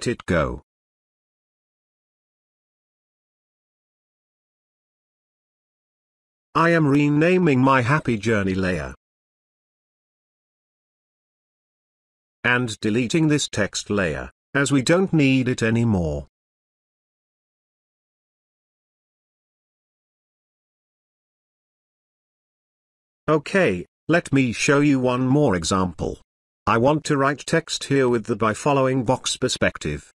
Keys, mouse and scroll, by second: 0.0 space, 0.2 click, 0.5-0.8 space, 1.0-1.9 ctrl+drag, 4.8 click, 5.5-8.9 typing, 9.0 Return, 13.4 click, 16.3 Delete, 18.5 space, 19.0-20.2 ctrl+drag, 23.0 click.